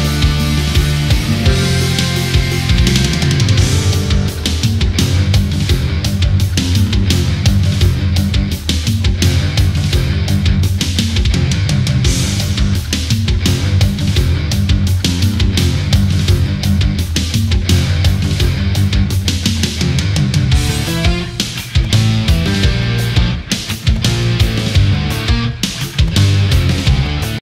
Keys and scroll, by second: 2.6 space, 8.6 ctrl+0, 9.4 ctrl+0, 10.9 ctrl+a, 14.0 ctrl+=, 14.3 space, 18.3 ctrl+z, 23.5 ctrl+0.